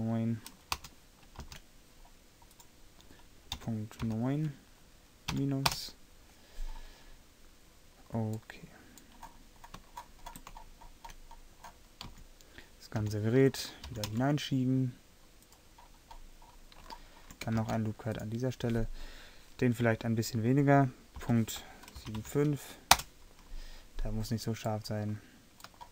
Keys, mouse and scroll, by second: 1.5 ctrl+r, 12.2 a, 13.1 l, 14.0 g, 17.7 ctrl+r.